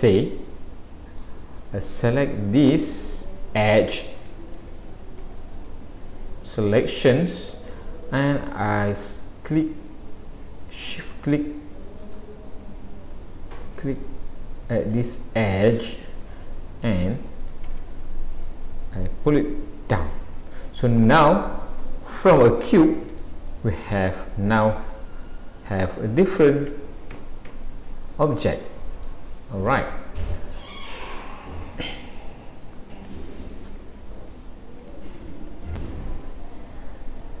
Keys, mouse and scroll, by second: 0.1 middle click, 2.4 click, 11.8 click, 17.7 shift+click, 19.1 click, 20.9 middle click, 21.9 middle click, 23.5 middle click, 26.7 a, 27.5 a, 28.1 middle click, 28.1 a, 29.6-30.3 scroll down 2.